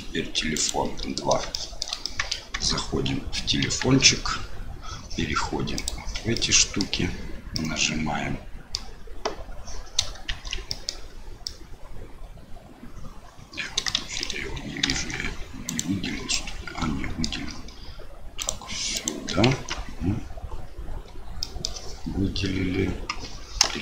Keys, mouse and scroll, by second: 0.5 shift+click, 1.5 shift+middle click, 2.0 middle click, 2.5 Tab, 3.6 KP_1, 5.7 click, 6.3 middle click, 7.5-8.7 middle drag, 10.3 shift+z, 10.6 middle click, 11.4-13.9 middle drag, 14.1 shift+z, 14.2 middle click, 15.0 Tab, 15.6 click, 16.3 middle click, 18.3 shift+click, 18.9 shift+click, 19.5 Tab, 20.9 a, 21.4 middle click, 23.7 KP_1.